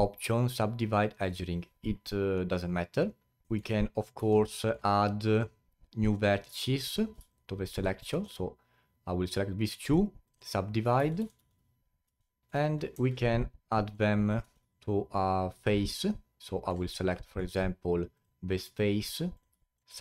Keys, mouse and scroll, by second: 3.4 alt+middle drag, 3.7-4.1 scroll up 4, 4.1 1, 4.5-4.9 alt+middle drag, 4.9-5.6 scroll up 4, 6.1 click, 6.7 shift+click, 7.3-7.8 alt+drag, 7.8-8.2 alt+middle drag, 8.2-9.8 scroll up 2, 9.8 right click, 12.0 a, 12.4 alt+middle click, 12.6-12.9 scroll down 2, 12.9 3, 13.5 click, 14.7-16.4 alt+drag, 16.4-16.9 alt+middle drag, 16.9-17.3 alt+drag, 17.3-17.7 alt+middle drag, 17.7-18.1 scroll up 3, 18.1 click, 19.3 click, 19.6 alt+drag, 19.8-20.0 right drag.